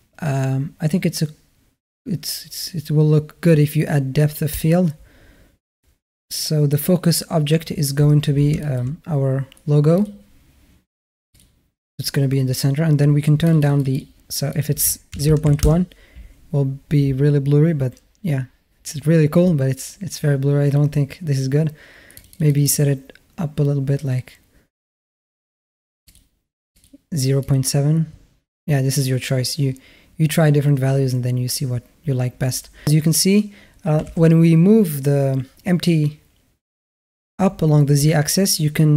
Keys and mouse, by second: 4.3 click, 8.4 shift+drag, 9.8 click, 13.3 click, 13.4 click, 13.6 click, 13.7 click, 14.3-15.5 drag, 22.0 click, 22.1 click, 22.3 click, 22.4 click, 26.5 click, 27.3 click, 33.8 g.